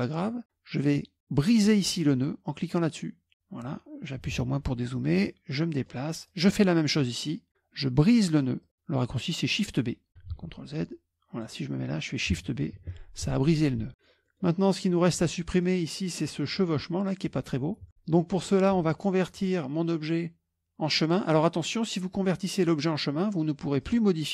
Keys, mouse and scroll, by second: 0.3 click, 3.3 click, 4.3 KP_Subtract, 5.3 middle click, 6.3 click, 8.7 click, 10.4 ctrl+z, 11.0 click, 12.9 shift+b, 13.9 KP_Subtract, 13.9 middle click, 14.4 middle click, 15.0 middle click, 15.1-16.2 scroll down 3, 15.5 middle click, 16.2 middle click, 18.2 middle click, 19.4 click, 21.4 click, 23.8 click.